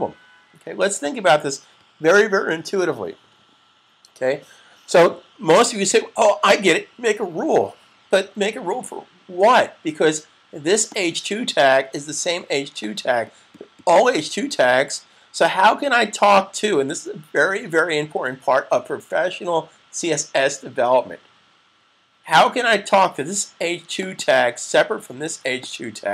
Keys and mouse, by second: 10.8 click, 23.7 click.